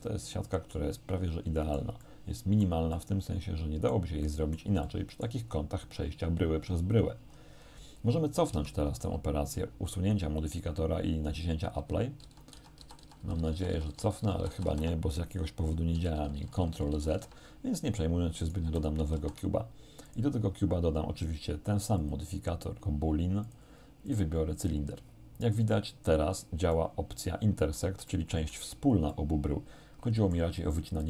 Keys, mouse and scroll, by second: 0.5 shift+middle click, 1.3 middle click, 3.0-4.1 middle drag, 4.3 middle click, 7.3-7.9 scroll down 1, 8.5 Tab, 9.1 ctrl+z, 11.8 ctrl+z, 16.0 ctrl+z, 18.5 right click, 18.7 x, 18.9 click, 19.3 shift+a, 20.1 click, 22.1 click, 22.9 click, 23.5 click, 24.1 click, 24.7 click, 26.8-28.0 middle drag, 28.1 shift+middle click, 29.1-30.6 shift+middle drag.